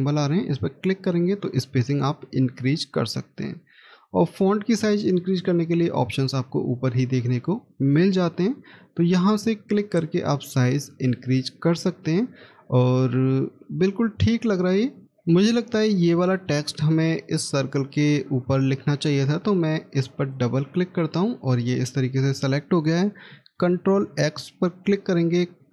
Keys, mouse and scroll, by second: 14.3-15.0 scroll down 1, 20.3 double click, 23.6 ctrl+x.